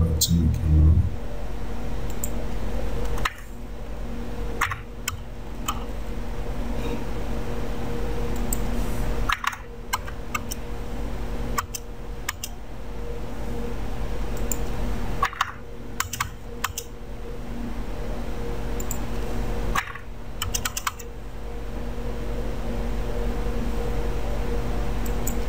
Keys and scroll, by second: 3.4 BackSpace, 9.4 BackSpace, 10.1 space, 15.4 BackSpace, 19.9 BackSpace, 20.6 space.